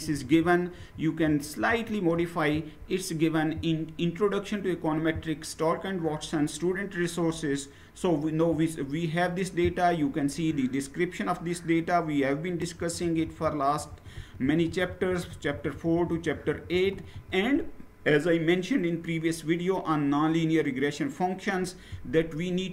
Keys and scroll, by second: 0.0 Down, 0.5 Down, 1.2 shift+Down, 1.4 shift+Down, 10.2 Down, 10.8-12.2 Down, 13.0 Down, 13.2 Down, 13.4 Down, 13.6 Down, 14.3 Down, 14.6 Down, 15.1 Down, 15.2 Down, 15.4 Down, 15.9 Down, 16.2 Down, 16.4 Down, 16.6 Down.